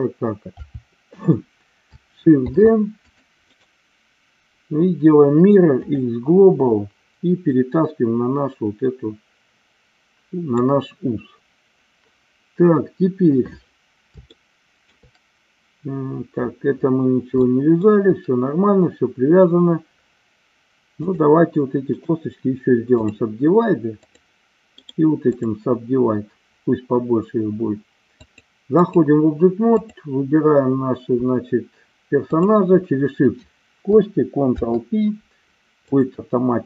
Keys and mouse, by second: 0.5 KP_7, 2.5 shift+d, 3.1 click, 3.5-6.0 right drag, 7.4-10.6 drag, 14.3 shift+middle click, 17.4 shift+middle click, 21.0 click, 22.0-23.2 right drag, 24.0 click, 24.9 right click, 28.1 click, 34.5 ctrl+p.